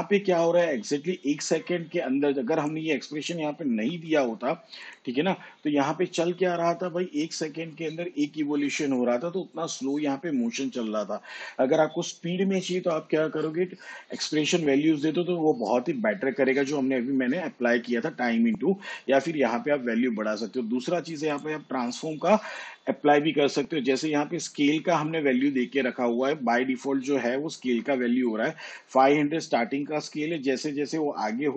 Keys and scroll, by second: 3.9 BackSpace, 12.9 shift+/.